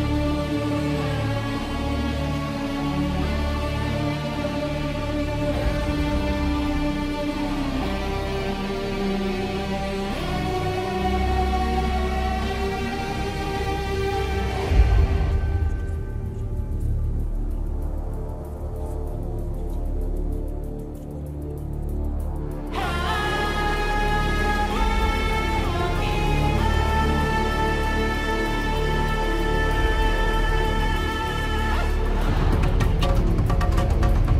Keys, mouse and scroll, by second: 0.0-0.1 typing, 1.7 click, 1.7 s, 2.4-3.9 shift+middle drag, 2.7 g, 3.5 ctrl+KP_3, 3.6 ctrl+r, 3.9 click, 4.0-6.6 typing, 4.2 middle click, 4.3 click, 4.6-10.3 middle drag, 8.0-9.6 typing, 8.4 ctrl+shift+d, 8.4 ctrl+m, 8.9 ctrl+j, 8.9 Tab, 9.2 Tab, 10.3 shift+click, 10.3-12.0 ctrl+shift+middle drag, 10.4 ctrl+shift+b, 11.7 ctrl+a, 12.0 click, 12.1 Delete, 12.1-12.5 middle drag, 12.2 Delete, 12.5 click, 12.5-15.4 typing, 12.6-14.8 shift+middle drag, 14.6 ctrl+KP_3, 14.8 click, 15.3-19.7 middle drag, 17.3 ctrl+KP_7, 18.1 z, 18.2 Tab, 18.4 ctrl+shift+b, 19.1 ctrl+KP_7, 19.7-21.9 right drag, 20.4 a, 21.9 ctrl+middle click, 22.2 ctrl+l, 22.7 click, 22.7 right click, 23.0 middle click, 23.6-26.3 right drag, 23.6 g, 24.2 Tab, 24.4 Tab, 24.8 Tab, 25.4 Tab, 25.5 a, 26.1 Tab, 26.1 Tab, 26.2 a, 26.5 middle click, 26.6-27.1 drag, 26.6-29.1 middle drag, 26.6-27.1 right drag, 27.3 click, 27.3 right click, 28.2 click, 28.2 right click, 29.1 right click, 29.3 middle click, 29.4-31.3 right drag, 30.0 Tab, 30.2 Tab, 30.3 a, 30.5 g, 30.7 a, 30.8 Tab, 31.3-33.6 middle drag, 33.5 g, 33.6 right click, 34.1 shift+s.